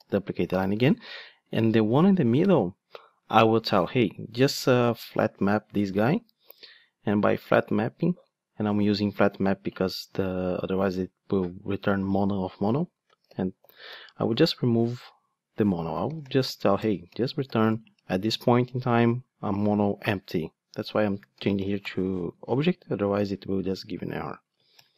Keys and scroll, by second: 5.2 Return, 16.8 Return.